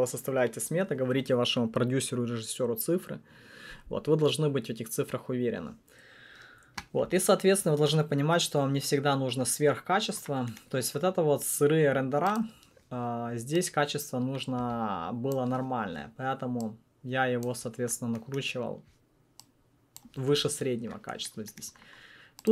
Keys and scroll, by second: 12.4 1.